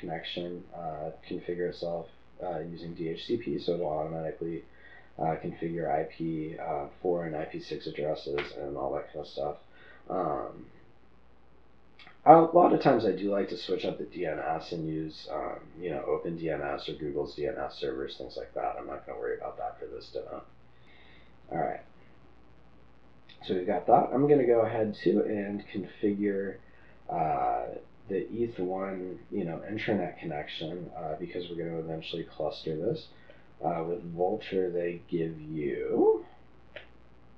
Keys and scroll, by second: 20.8 typing.